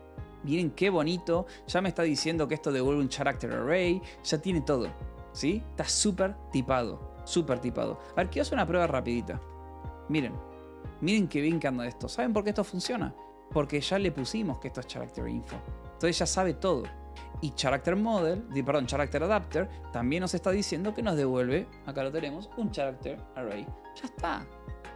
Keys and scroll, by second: 0.5 l, 7.5-8.6 typing, 8.9 Escape, 10.0 ctrl+s, 12.2-15.9 typing, 14.9 Escape, 17.5 e, 18.5 h, 19.5 shift+k, 24.5 Escape.